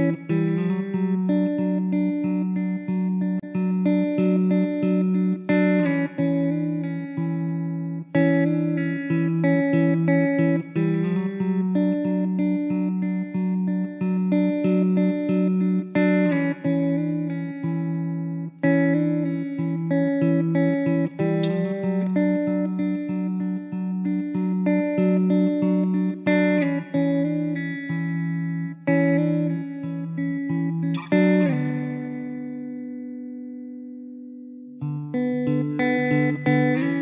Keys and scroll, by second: 1.3 `, 3.1 x, 4.1 x, 5.2 alt+z, 5.2 alt+z, 7.1 ctrl+alt+z, 8.3 ctrl+z, 9.7 g, 12.3 g, 13.0 Tab, 13.3 ctrl+z, 13.5 ctrl+z, 14.5 g, 15.2 ctrl+z, 16.9 g, 17.3 ctrl+x, 17.7 ctrl+z, 18.4 alt+z, 18.6 Tab, 23.6 shift+d, 26.0 r, 36.6 KP_0.